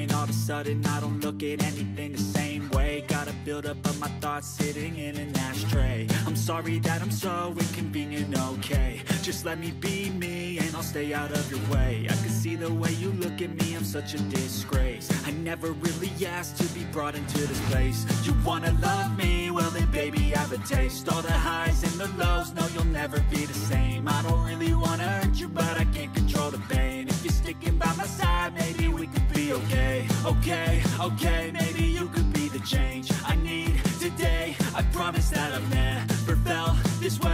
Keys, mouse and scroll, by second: 7.1 ctrl+-, 7.4 ctrl+-, 7.7 ctrl+-, 10.7 right click, 23.9 double click, 28.3-29.7 drag.